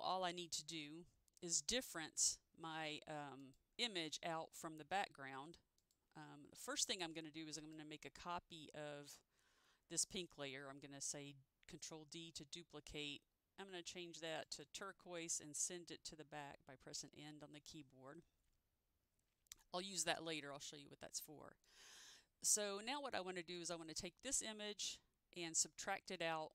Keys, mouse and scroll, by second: 3.5 click, 7.7 click, 12.2 ctrl+d, 14.6 click, 16.8 End, 21.8 click, 23.7 click, 26.3 click.